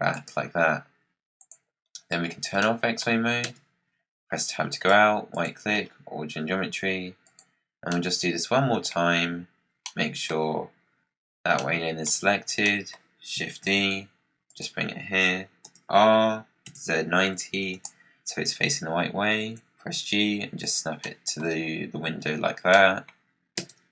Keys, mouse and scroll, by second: 1.3 click, 1.8-2.5 scroll down 8, 2.5 middle click, 3.4 Tab, 3.8-4.6 scroll up 4, 4.6 scroll up 1, 4.6-5.7 right drag, 5.7-7.1 scroll down 8, 7.1 click, 7.8-12.2 middle drag, 12.2-12.5 scroll up 3, 12.6 middle click, 13.5 shift+d, 15.5 r, 19.3 g, 20.9-22.0 middle drag, 22.0 KP_Decimal, 22.6-23.5 middle drag, 23.5 Tab.